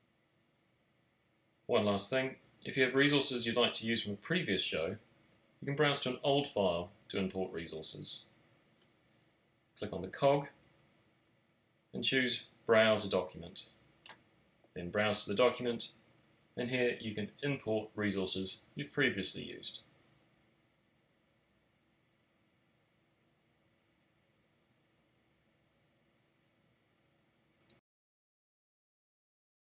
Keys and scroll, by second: 0.2 x, 0.4 x.